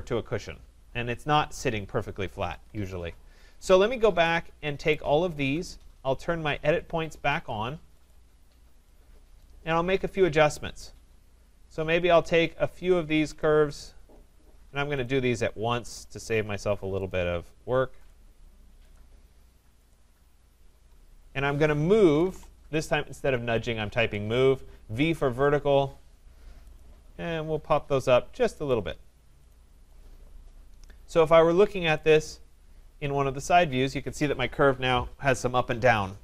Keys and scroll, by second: 23.9 Return.